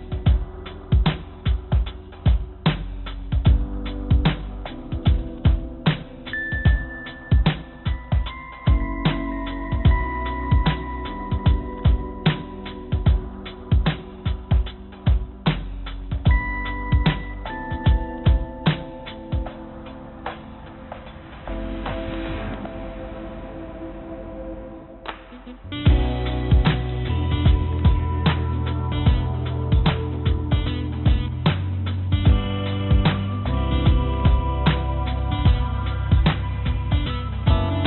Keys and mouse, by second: 0.9 click, 1.8 click, 17.6 click, 19.8 click, 19.9-21.0 drag, 24.5 click, 32.0 click, 32.7-37.3 drag, 37.8 Tab.